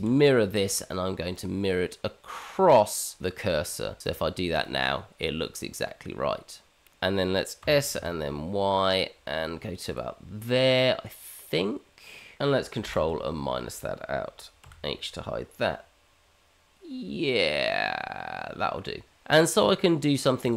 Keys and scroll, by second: 6.9 Tab, 7.6 s, 12.9 ctrl+KP_Subtract, 14.6 h.